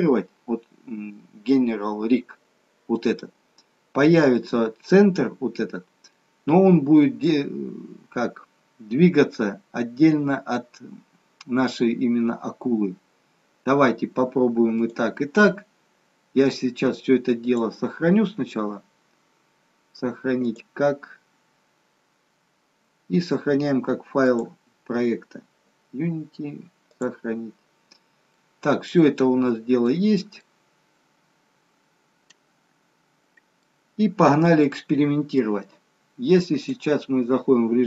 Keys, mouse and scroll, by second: 6.7 middle click, 14.7 click, 31.3 middle click, 31.3-32.3 scroll down 2, 32.3 middle click, 33.8-34.3 scroll up 3, 35.0 middle click, 36.5 click.